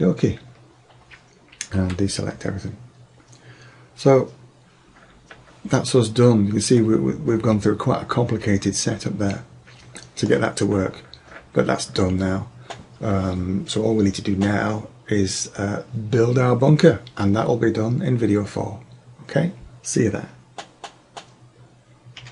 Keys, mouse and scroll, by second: 1.9 a, 6.8-7.3 middle drag, 7.4 middle click, 8.8 middle click, 9.2 middle drag, 10.2 middle click.